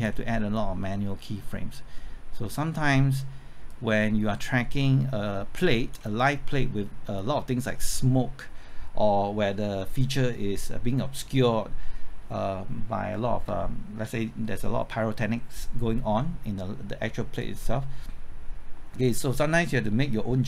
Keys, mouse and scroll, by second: 6.8-8.3 scroll down 1, 9.7-13.4 scroll up 1, 17.4-20.4 drag.